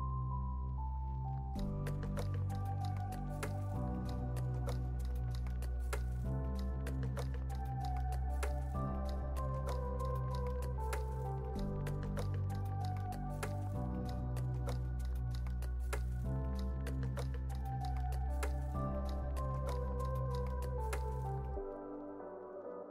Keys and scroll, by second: 0.4 x, 5.1 z, 5.9 x, 7.8 z, 11.9 9, 12.3 8, 13.1 Return, 15.1-17.2 typing, 18.7-21.6 typing.